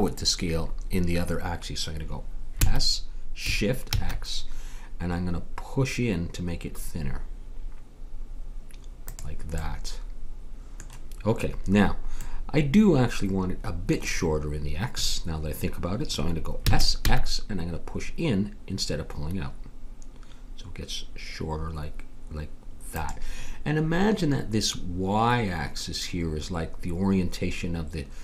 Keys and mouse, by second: 2.6 s, 9.8-15.4 middle drag, 16.6 s.